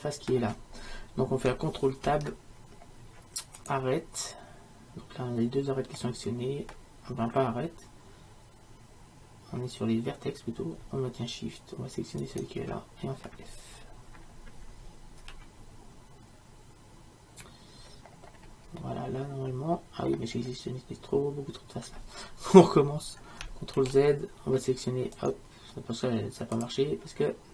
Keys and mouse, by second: 2.1 ctrl+Tab, 5.5 click, 5.6-12.3 middle drag, 12.3-15.2 right drag, 15.2 f, 18.4 middle click, 19.8-23.6 middle drag, 23.8 ctrl+z, 25.2-27.0 middle drag.